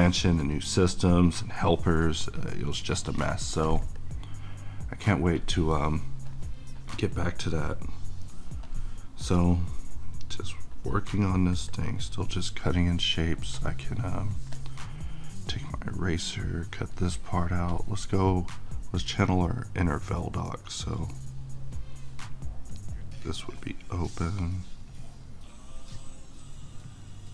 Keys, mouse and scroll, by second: 21.8-27.3 drag.